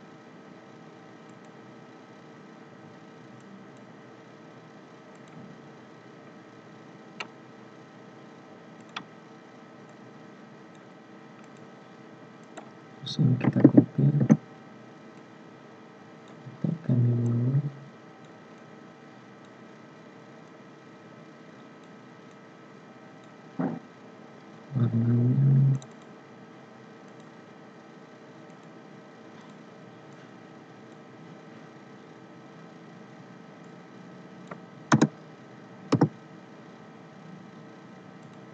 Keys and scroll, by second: 13.6 ctrl+c, 14.2 ctrl+f.